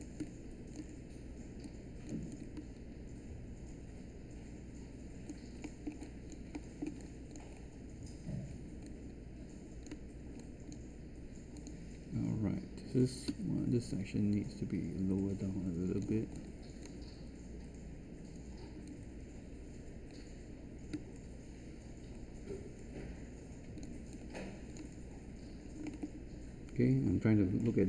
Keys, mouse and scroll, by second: 13.2 w.